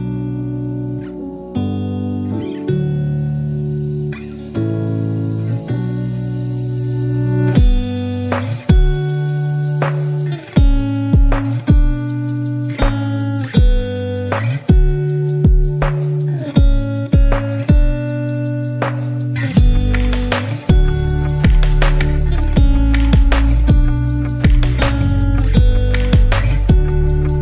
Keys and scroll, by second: 15.4 Return, 20.4 super+-, 22.4 space, 23.9 v, 25.1 i, 26.1-27.4 typing.